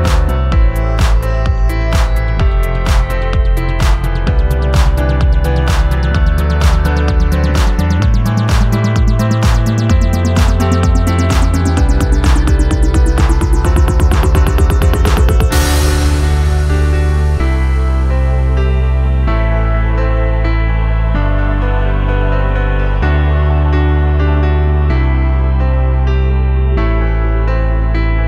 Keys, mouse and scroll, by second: 5.2-6.2 alt+Left, 6.8 alt+Left.